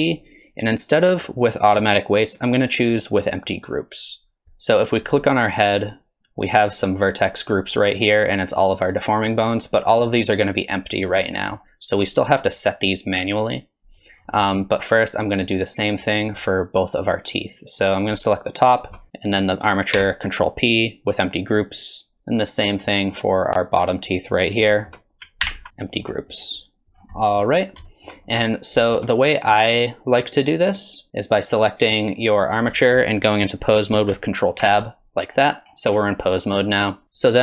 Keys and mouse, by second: 14.3 middle click, 15.3 click, 20.0 ctrl+p, 22.6 click, 24.7 shift+drag, 25.4 ctrl+p, 26.6 click, 27.2 drag, 27.9 shift+drag, 28.3 click, 28.8 shift+drag, 29.3 drag, 32.5 drag, 34.6 ctrl+Tab.